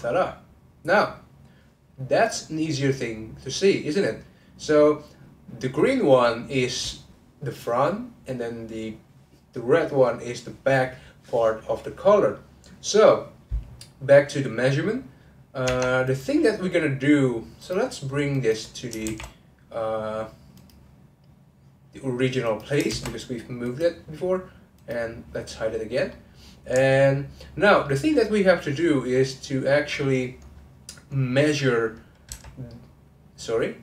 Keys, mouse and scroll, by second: 0.5 click, 1.0 click, 1.6-6.0 middle drag, 15.6 Tab, 16.1 click, 17.6 click, 18.3 click, 19.1 shift+s, 22.4 click, 22.9 shift+s, 24.7 click, 26.1-29.8 middle drag, 29.8-30.4 scroll up 1, 31.6 click, 32.3 1, 32.7 click, 33.3 ctrl+z, 33.7 ctrl+z.